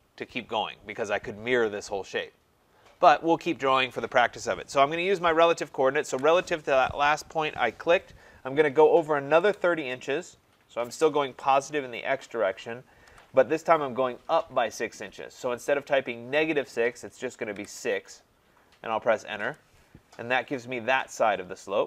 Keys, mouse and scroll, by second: 5.6 click, 6.1 @, 9.1-10.0 typing, 13.1 ,, 17.6 6, 19.4 Return.